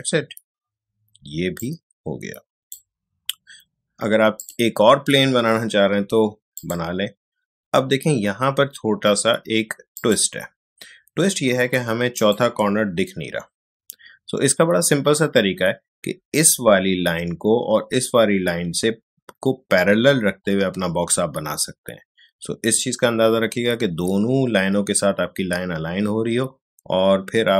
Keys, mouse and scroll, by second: 10.0 click.